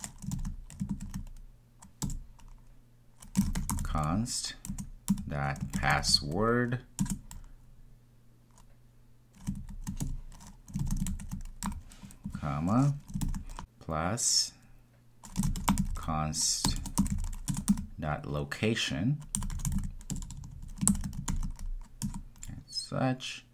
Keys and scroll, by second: 4.7 Return, 17.6 Return, 22.0 Return.